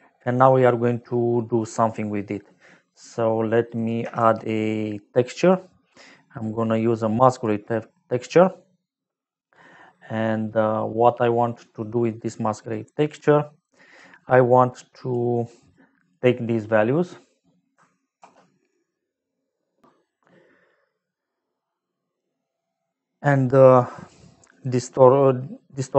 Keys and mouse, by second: 0.8 middle click, 1.6 click, 2.2 middle click, 3.0 middle click, 3.7 click, 4.1 shift+a, 5.3 click, 6.9 click, 7.7 middle click, 10.7 middle click, 12.7 click, 13.5 click, 14.7 click, 15.7 click, 18.2 ctrl+s, 21.8 middle click, 23.1 click, 23.8 click, 24.5 click.